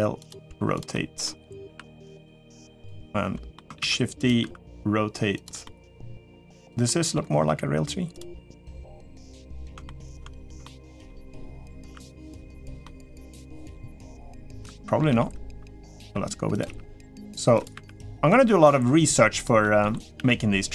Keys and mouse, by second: 0.2 g, 0.7 middle click, 1.4 r, 2.1 g, 2.7 middle click, 3.6 shift+d, 4.2 r, 5.4 middle click, 6.0 g, 6.6 middle click, 7.4 g, 8.1 middle click, 8.8 middle click, 9.6 middle click, 10.4 shift+middle click, 10.8 middle click, 11.6 r, 12.6 middle click, 13.4 r, 14.5 middle click, 15.8 r, 15.8 g, 16.4 g, 17.5 r, 19.4 middle click, 19.9 r.